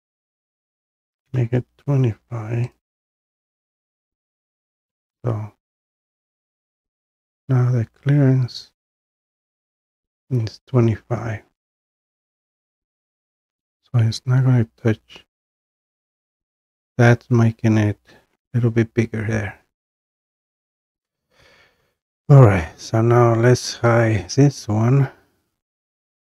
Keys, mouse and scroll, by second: 0.2 click, 1.1-1.5 typing, 2.8 click, 5.2 scroll, 6.2 scroll, 6.8 scroll, 7.5 scroll down 3, 9.9 scroll down 1, 10.5 scroll down 1, 12.1-12.6 scroll, 13.4 scroll, 14.1 scroll, 15.7-19.7 scroll up 8, 19.7-21.6 scroll up 1, 21.6 scroll, 23.9 click.